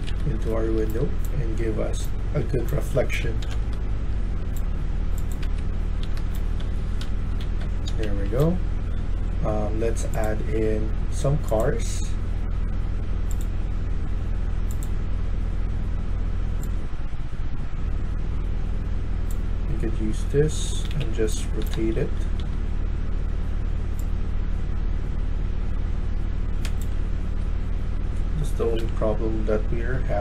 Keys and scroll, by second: 0.4-4.6 typing, 5.3 Escape, 5.8-8.3 typing, 20.3-21.9 typing, 26.5-27.2 s, 28.7 Delete.